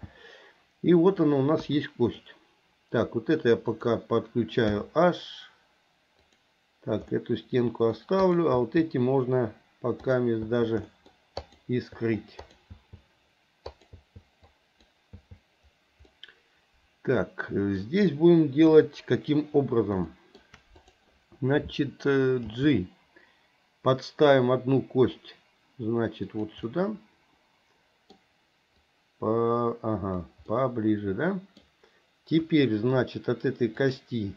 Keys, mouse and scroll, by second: 1.6 KP_1, 3.7 click, 4.7 h, 6.2 click, 7.2-7.9 middle drag, 8.3 click, 8.6 h, 10.4 h, 10.9 middle drag, 11.4 click, 12.0 h, 12.4 click, 12.8 h, 13.7 click, 14.0 h, 14.5-14.9 drag, 15.2 h, 16.1-17.8 middle drag, 18.7 KP_1, 20.1 shift+middle drag, 20.9 click, 22.5 g, 26.7-28.1 middle drag, 28.9-30.3 drag, 30.6-31.6 middle drag, 32.5 KP_1, 33.8 click.